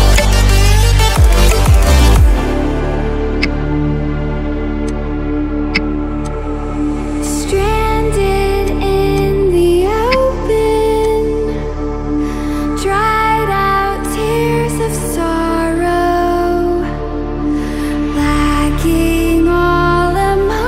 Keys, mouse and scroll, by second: 0.0 ctrl+shift+z, 0.1 m, 1.1 alt+click, 3.2 ctrl+a, 4.8 alt+click, 5.7 v, 6.2-7.7 drag, 10.0 g, 11.0-13.2 drag, 15.6-18.3 drag, 18.7 ctrl+click.